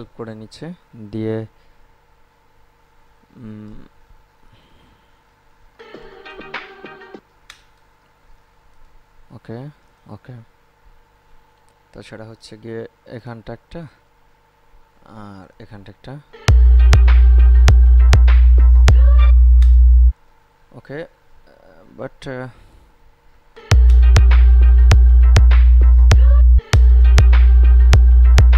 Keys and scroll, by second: 6.0 space, 7.4 space, 16.5 space, 19.6 space, 23.7 space, 26.6 space.